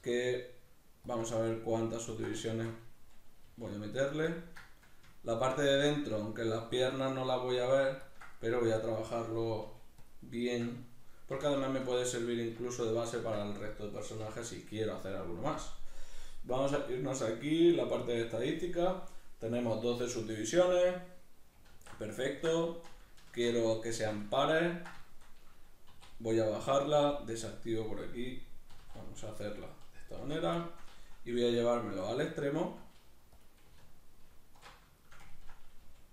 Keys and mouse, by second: 1.1 ctrl+click, 1.3 middle click, 2.1 ctrl+click, 2.5-4.3 shift+middle drag, 3.5 g, 4.3 ctrl+click, 4.6 middle click, 5.3 ctrl+click, 5.6-7.6 middle drag, 7.6 ctrl+click, 8.3 middle click, 9.0 right click, 9.3-10.4 middle drag, 9.6 g, 10.1 click, 10.4 shift+right click, 11.8 f, 11.9-14.0 shift+middle drag, 14.0 right click, 14.3 l, 16.5-20.4 drag, 20.4-21.7 middle drag, 21.7 alt+q, 22.3-26.8 ctrl+middle drag, 23.3 shift+Tab, 25.9 e, 26.8 click, 28.7 s, 29.7 click, 30.3 alt+q, 30.6-31.7 shift+middle drag, 31.4 g, 31.7 click, 31.9 s, 32.7 click, 32.8 g, 33.5 click, 33.8 alt+q, 35.0 shift+middle click, 35.9 g.